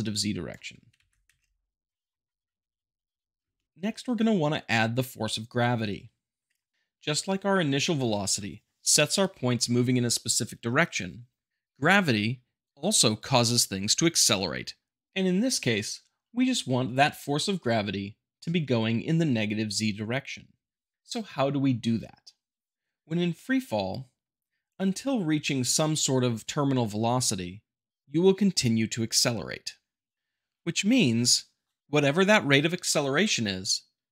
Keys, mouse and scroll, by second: 0.9 shift+Left, 1.2 space, 2.1-3.1 middle drag, 6.4 click.